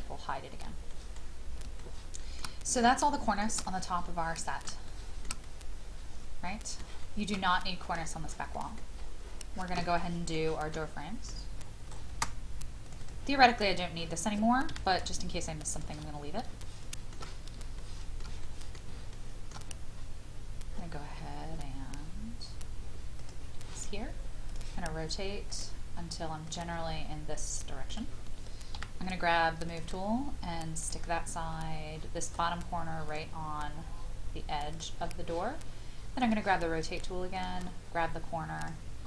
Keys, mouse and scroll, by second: 0.9 middle click, 1.1-1.5 scroll down 1, 1.8 shift+middle click, 2.4 scroll down 1, 3.1 shift+middle click, 3.6 middle click, 4.9 shift+middle click, 5.4-6.9 middle drag, 9.0 scroll up 1, 10.0 shift+middle click, 10.7 shift+middle click, 11.1 scroll up 1, 12.8-14.0 drag, 14.7 m, 15.7 click, 16.1-16.4 scroll down 1, 16.6 shift+middle click, 18.4 middle click, 19.1 shift+middle click, 20.7-22.8 scroll up 1, 23.1 click, 28.7 m, 29.7 click, 31.9 scroll up 1, 33.1 click, 34.2-34.7 scroll up 1, 34.7-38.4 drag.